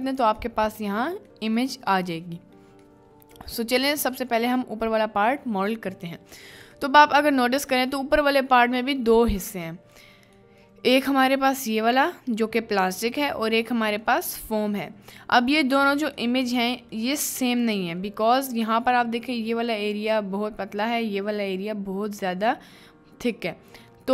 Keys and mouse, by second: 0.6 middle click, 0.9 middle click, 1.7 middle click, 2.3 middle click, 3.0 middle click, 3.6 middle click, 4.0 middle click, 6.9 middle click, 7.6 middle click, 8.9 middle click, 9.8 middle drag, 10.5 middle click, 13.1 middle click, 13.4-14.1 middle drag, 14.9 middle click, 16.3 middle click, 16.9 middle click, 17.6 click.